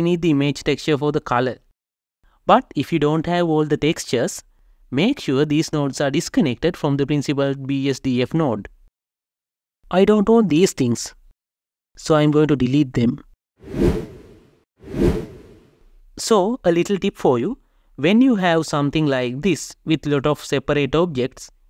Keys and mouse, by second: 11.5-12.1 drag, 12.5 Delete, 12.8 click, 13.0 Delete, 13.5 click, 14.0 Delete, 14.6-14.9 drag, 15.3 shift+click, 16.2 Delete.